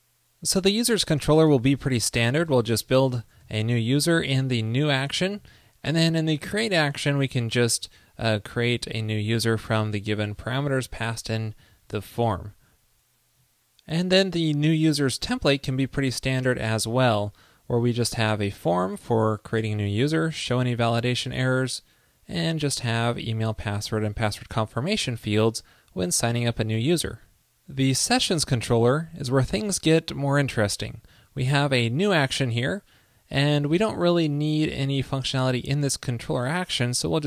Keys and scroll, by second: 5.4 super+v, 8.5 super+Right, 12.1 super+s, 15.9 super+a, 16.5 super+v, 27.0 super+s.